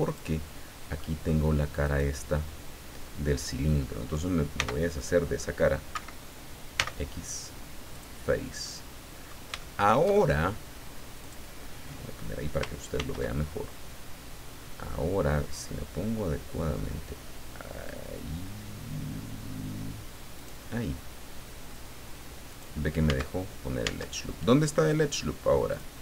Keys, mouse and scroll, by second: 0.0 click, 1.0 middle click, 1.8 right click, 4.6 c, 5.9 Escape, 6.7 x, 7.9 click, 8.6 middle click, 9.6-10.6 shift+middle drag, 11.2 click, 12.9 ctrl+r, 20.4 click, 22.5 click, 23.1 Tab, 23.8 Tab, 25.7 click.